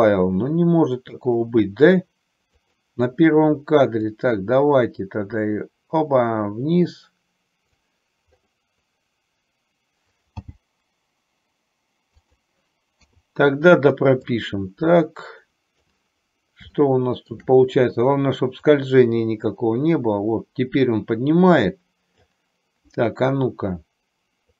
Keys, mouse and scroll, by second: 1.5 click, 2.9 click, 4.4-8.1 drag, 10.5 g, 13.4 i, 14.6-16.1 drag, 17.0 shift+middle click, 19.0-22.6 drag.